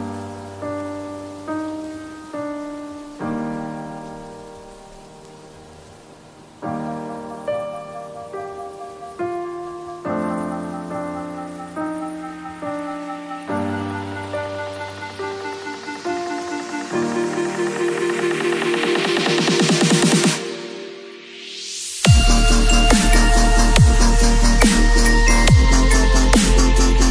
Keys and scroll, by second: 6.4 ctrl+t, 13.0 space, 14.0 F4, 22.2 v, 22.4 ctrl+a, 22.7 ctrl+c, 23.0 ctrl+w, 23.3 Return, 25.9 ctrl+v, 26.2 ctrl+t.